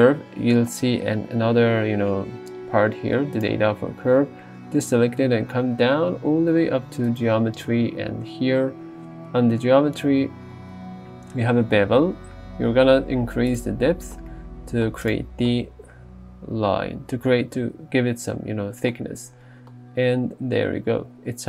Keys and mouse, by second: 3.4 click, 7.2 click.